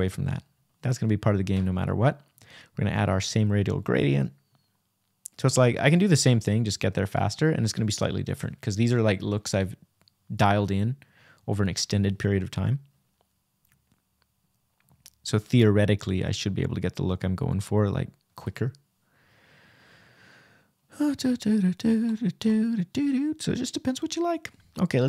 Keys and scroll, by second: 0.7 Return, 14.6 \, 17.0 Right.